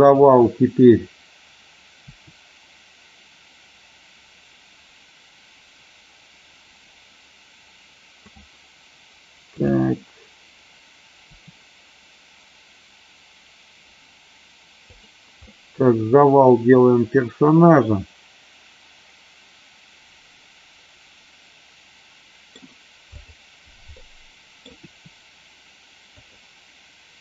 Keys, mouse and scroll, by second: 2.0 r, 8.2 click, 11.2 r, 14.9 click, 15.5-22.6 middle drag, 23.1-23.5 drag, 24.0 middle click, 24.8 r.